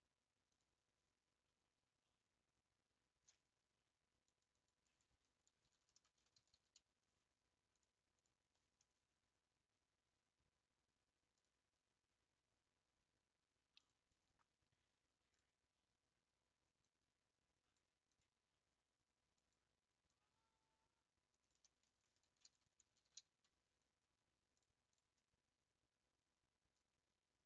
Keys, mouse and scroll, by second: 0.8-10.9 drag, 14.1-25.1 drag, 26.4-26.8 scroll up 5, 27.1 scroll down 2.